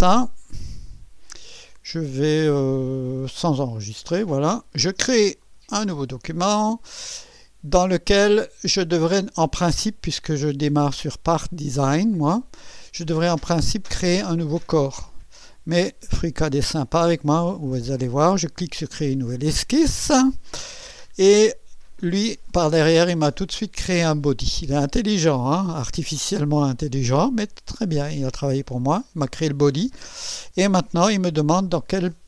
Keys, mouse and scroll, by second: 0.6 click, 3.4 click, 5.4 click, 18.5 click, 22.4 click, 29.2 click.